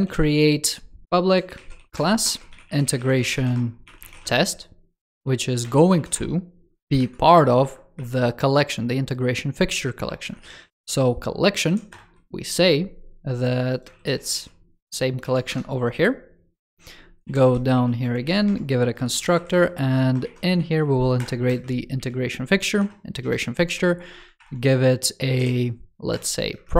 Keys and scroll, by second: 13.8 ctrl+s, 14.2 super+c, 15.1 super+v, 19.2 super+Right, 24.3 super+Return.